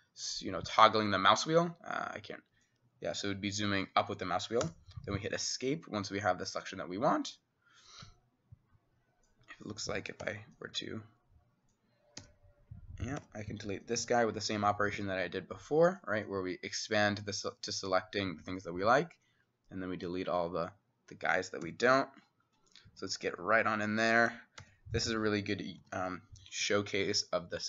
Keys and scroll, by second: 4.7 x, 10.2 e, 12.2-13.7 typing, 15.8-16.5 typing, 21.7 c, 24.6 c, 26.3 [, 26.7-27.6 [.